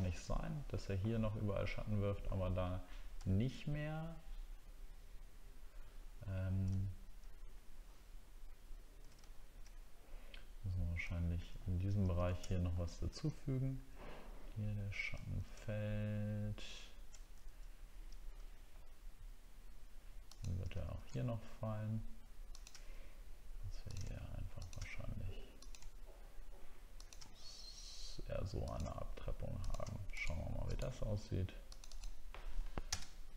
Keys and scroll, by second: 3.2 alt+scroll up 1, 9.3 alt+scroll down 1, 11.1 alt+scroll up 1, 12.4 alt+scroll up 1, 15.3 alt+scroll down 1, 17.2 alt+scroll up 1, 32.9 ctrl+BackSpace.